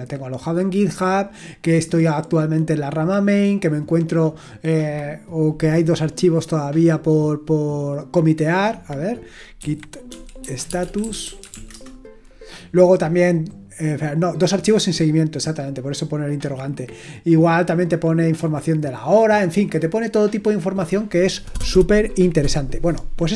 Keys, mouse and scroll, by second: 9.3-12.0 typing.